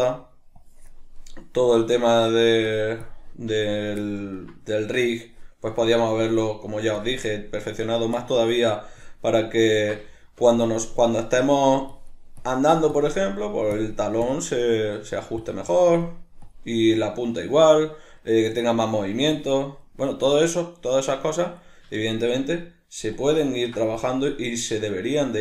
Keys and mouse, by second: 0.6-1.1 drag, 1.1-1.7 middle drag, 1.7-3.5 drag, 3.5-5.3 shift+middle drag, 5.3-5.8 drag, 5.8-6.2 ctrl+middle drag, 6.2-7.4 drag, 7.4-9.0 middle drag, 9.0-9.4 drag, 9.4-10.8 middle drag, 10.8-13.3 drag, 13.3-13.8 middle drag, 13.8-14.9 drag, 14.9-15.4 middle drag, 15.4-17.6 drag, 17.6-19.4 middle drag, 19.4-19.8 drag, 19.8-23.2 middle drag, 23.2 click, 23.5-24.0 ctrl+middle drag, 24.0-24.4 drag, 24.4-25.4 middle drag.